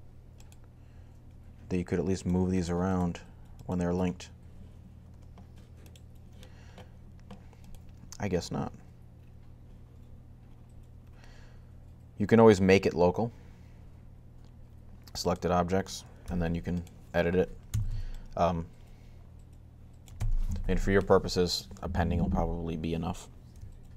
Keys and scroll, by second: 16.0 g, 17.3-18.0 typing.